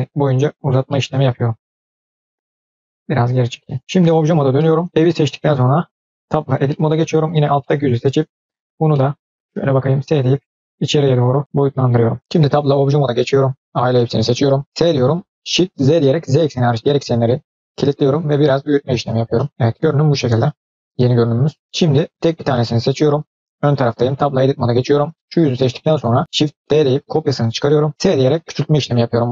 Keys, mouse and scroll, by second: 0.8-2.1 middle drag, 2.5 g, 4.1 Tab, 4.5-4.8 middle drag, 4.9 click, 4.9 scroll down 2, 5.2-5.7 middle drag, 6.2 Tab, 6.5 middle click, 7.1 click, 7.5-8.5 middle drag, 8.8 middle click, 9.8 s, 11.4 middle click, 13.6 a, 13.8-14.7 middle drag, 14.7 s, 19.2 middle drag, 19.5 scroll down 2, 19.6-21.3 middle drag, 21.4 scroll up 2, 22.0 click, 22.4-23.7 middle drag, 23.9 Tab, 24.6 click, 26.5 shift+d, 27.9 s.